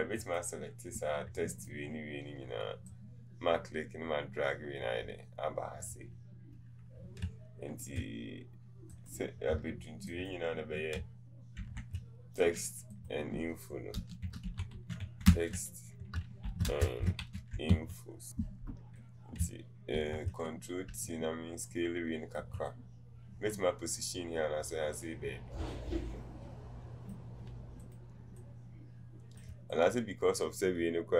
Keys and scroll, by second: 16.2-17.7 typing, 18.3 Return.